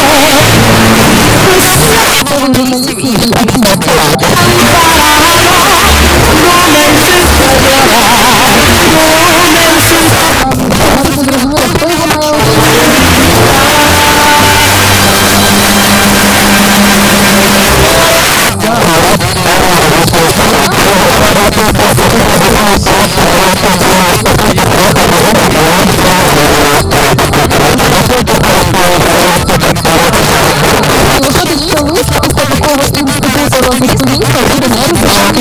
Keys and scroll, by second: 2.0 Page_Down, 10.1 Page_Down, 18.2 Page_Down.